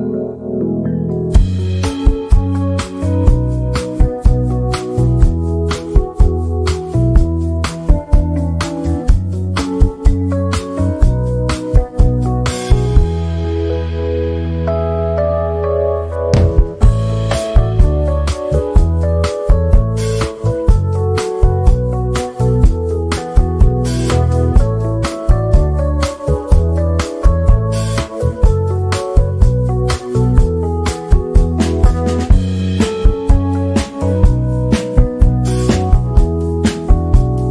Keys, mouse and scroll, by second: 0.5 right click, 1.6-3.5 drag, 3.5 ctrl+r, 4.1-6.6 drag, 8.3 z, 8.5-17.6 drag, 18.0-18.4 shift+scroll down 1, 18.8 click, 20.3 shift+scroll down 1, 20.7 click, 23.8 z, 24.0-30.0 drag, 30.4-30.9 shift+scroll down 1, 31.1 shift+scroll down 1, 31.5 click, 33.7 Delete, 34.1 z, 34.7 click.